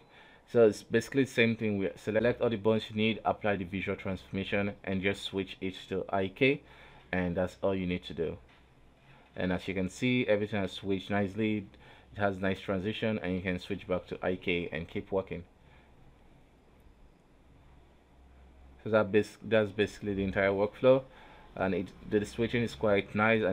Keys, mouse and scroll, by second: 2.1 click, 5.3 ctrl+a, 6.1 i, 6.8 right click, 7.5 alt+g, 8.1 a, 8.8 i, 9.6 Down, 10.4 Down, 10.9 Up, 11.3 Up, 13.9 click, 14.6 right click, 14.8 g, 16.2 r, 17.1 g, 17.9 a, 18.5 i, 19.3-20.5 drag, 20.5 right click, 21.1 right click, 21.2 g, 22.1 r, 22.7 a, 23.1 i.